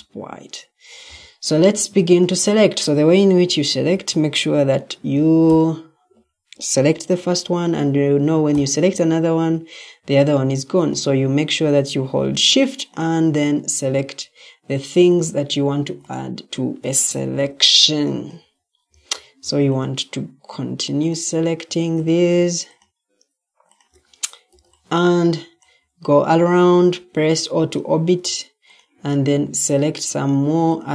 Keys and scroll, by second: 3.6 Escape, 18.8 Escape, 27.4 Escape.